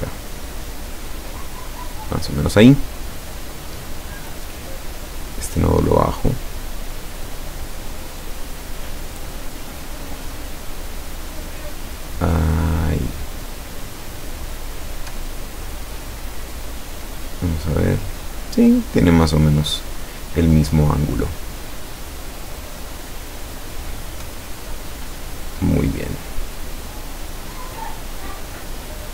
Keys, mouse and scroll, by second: 0.0-2.2 drag, 4.7 click, 6.0-7.5 drag, 10.4-13.5 drag, 14.4 click, 15.4-16.1 ctrl+scroll down 4, 24.7-25.4 ctrl+scroll down 4, 26.4-28.2 drag.